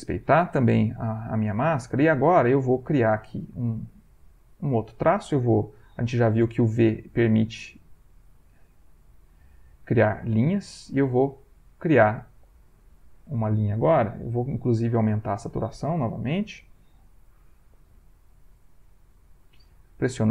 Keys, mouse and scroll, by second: 1.3 middle click, 2.6-3.8 shift+drag, 6.4 v, 7.3 click, 7.4 v, 8.5 click, 8.9 v, 9.3-11.6 drag, 14.2 ctrl+z, 14.9 ctrl+o, 17.6 click, 17.9 v, 19.4-20.3 drag.